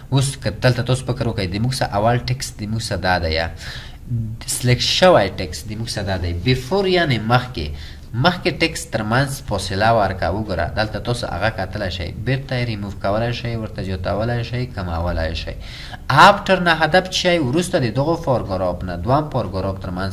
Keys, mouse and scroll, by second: 11.0 double click.